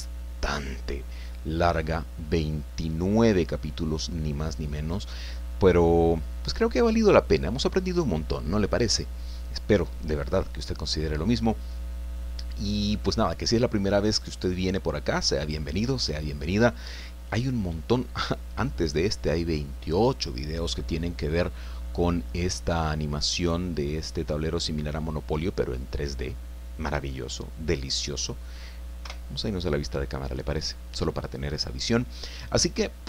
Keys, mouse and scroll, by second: 29.0 KP_0.